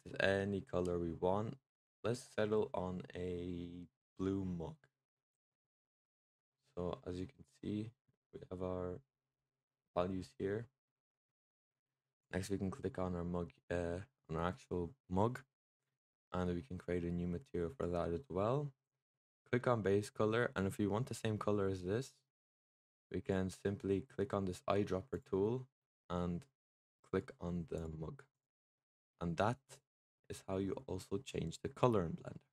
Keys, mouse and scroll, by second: 11.1-12.1 middle drag, 12.1 click, 17.6-19.3 drag, 22.6 click, 23.1 click, 28.2 click, 28.6-31.6 middle drag.